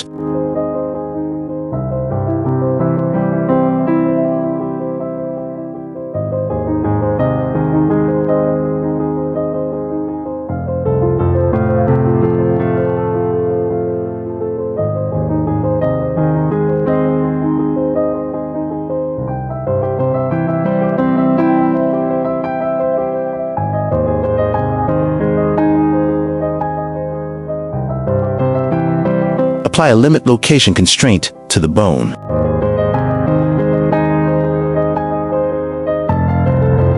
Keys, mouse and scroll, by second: 0.0-0.8 typing, 0.2 click, 0.3 shift+click, 0.8 click, 1.2 click, 1.8 s, 2.4 shift+middle click, 2.9-4.9 typing, 3.0 shift+middle click, 3.3 middle click, 4.1 middle click, 4.5 click, 5.6 shift+middle click, 5.7 shift+middle click, 5.9 shift+middle click, 7.5 shift+middle click, 8.0 Tab, 8.2-10.5 typing, 8.3 click, 8.8 shift+middle click, 9.1 middle click, 9.5 shift+middle click, 9.7 shift+middle click, 9.9 shift+middle click, 11.8 s, 12.5 Tab, 14.5 ctrl+a, 17.6 click, 18.9 drag, 19.7 click, 20.7 shift+middle click, 21.0 click, 23.4 q, 24.6 g, 28.4 click, 28.7-29.0 shift+middle drag, 30.8 click, 31.1-33.1 drag, 33.4-34.1 drag, 34.5 click, 36.0 g.